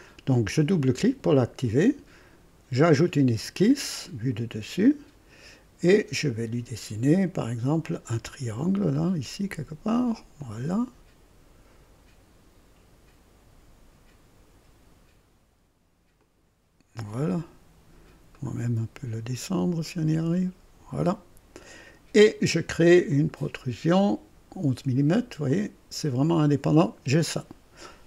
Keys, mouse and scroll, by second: 0.5 click, 2.8 click, 4.0 click, 4.8 click, 5.9 right click, 7.8 click, 10.4 click, 16.2 click, 18.3 right click, 19.8 click, 21.7 click, 23.1 click, 24.6 scroll up 2, 25.5 click, 26.3 click.